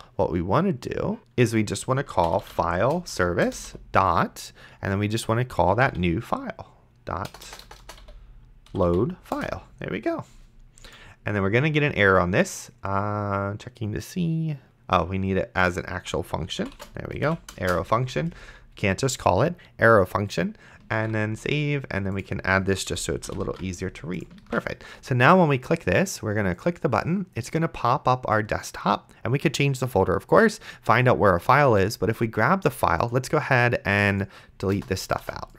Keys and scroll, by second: 1.2 ctrl+z, 1.9-3.7 typing, 3.5 Return, 5.5-9.4 typing, 16.6-18.1 typing, 21.2 ctrl+s, 22.9 Left, 23.3 ,, 23.7 ctrl+s, 24.7 ctrl+s, 35.0 BackSpace.